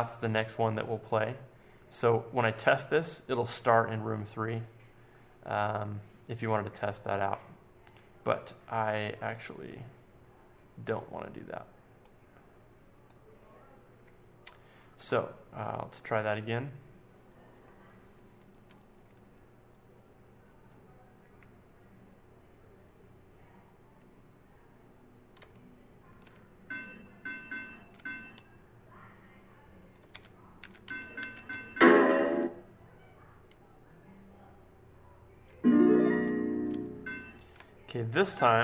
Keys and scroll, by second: 25.3 Left, 25.9 Left, 26.3 Up, 26.8 Up, 27.4 Up, 27.9 Up, 27.9 Right, 28.5 Right, 30.1 Right, 30.1 Up, 31.1 Up, 31.9 Left, 32.5 Left, 36.2 Down, 38.2 Right, 38.2 Up.